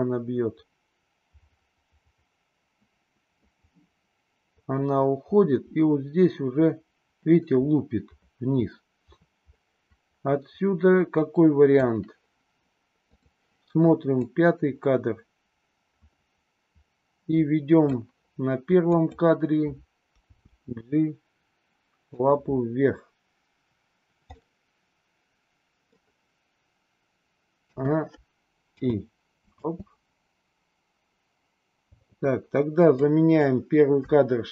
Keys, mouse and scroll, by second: 13.1 click, 14.2-18.0 drag, 19.0 click, 20.2 g, 24.3-25.8 middle drag, 24.3 scroll up 1, 27.6 a, 28.8 i, 29.5 space, 31.9 space, 32.9-33.5 drag.